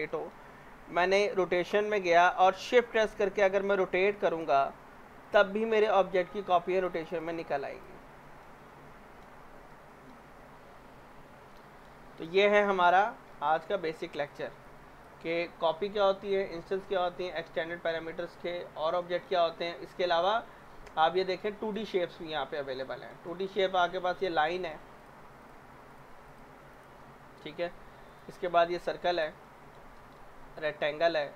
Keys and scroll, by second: 13.0 z, 13.9 w.